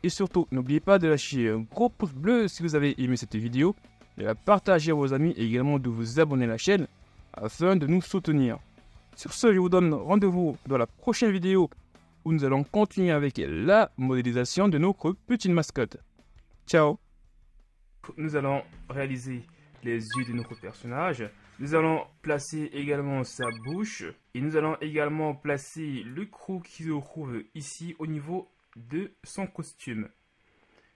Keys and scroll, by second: 24.2 z.